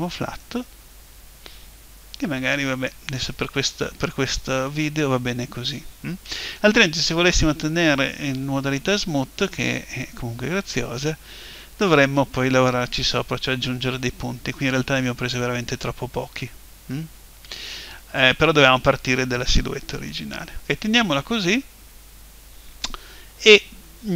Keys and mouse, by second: 0.4 right click, 1.2-2.2 middle drag, 3.6-8.4 middle drag.